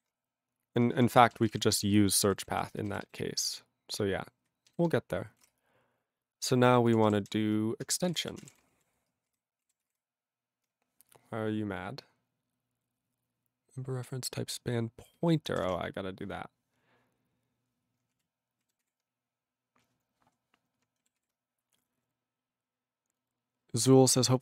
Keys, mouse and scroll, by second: 6.1-9.3 typing, 9.3 ctrl+g, 9.6 ctrl+a, 9.8 ctrl+space, 9.8 ctrl+e, 9.9 ctrl+g, 15.4 alt+b, 16.7-17.2 scroll, 18.2 ctrl+e, 18.9 ctrl+s, 21.2 ctrl+s.